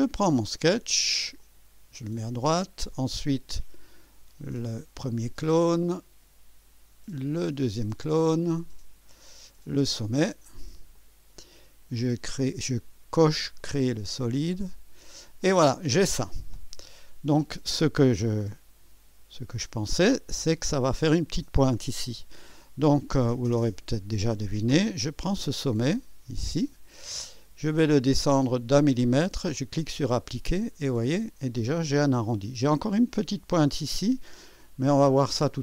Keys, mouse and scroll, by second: 0.1 click, 1.4 click, 4.0 click, 5.1 click, 7.3 click, 8.6 click, 9.6 click, 10.9 click, 13.6 click, 14.5 click, 15.4-17.7 drag, 18.1 click, 19.6 click, 23.0 click, 25.3 click, 26.0 click, 28.3 scroll down 2, 29.7 click, 30.9-33.1 drag, 33.7-35.4 drag, 35.5-35.6 drag.